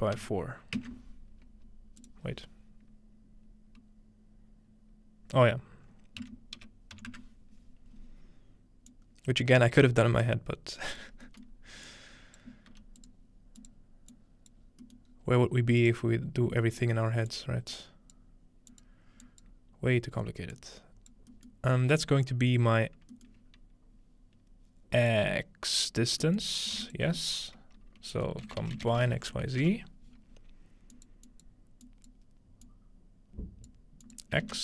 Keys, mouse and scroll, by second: 2.0-3.9 drag, 8.9 click, 10.2 click, 11.9 click, 12.7 g, 13.0 click, 13.7 click, 14.1 click, 14.7-15.1 scroll down 2, 15.1 scroll up 2, 15.8 click, 17.3-18.9 drag, 17.4-18.7 middle drag, 19.2 click, 20.5 click, 25.1 click, 26.8 shift+a, 28.4-29.9 typing, 30.9 click, 31.3 click, 31.8 click, 32.7-33.7 drag, 34.0 click, 34.4 ctrl+space.